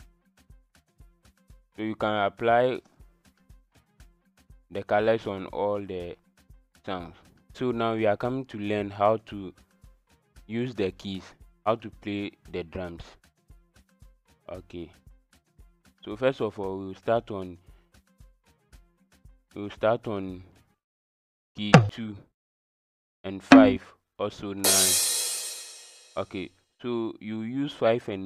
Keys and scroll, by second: 0.5 KP_1, 21.7 KP_2, 23.5 KP_5, 24.6 KP_9.